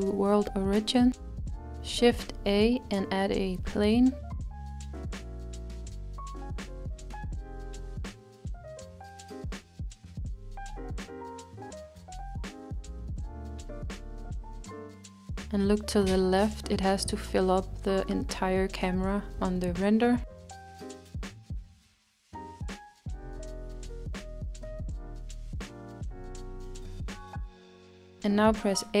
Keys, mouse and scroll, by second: 6.0-6.8 scroll down 2, 6.8-9.3 middle drag, 9.3-13.6 s, 23.4 s, 25.1-25.7 scroll down 7, 25.7-27.8 middle drag, 27.8 a.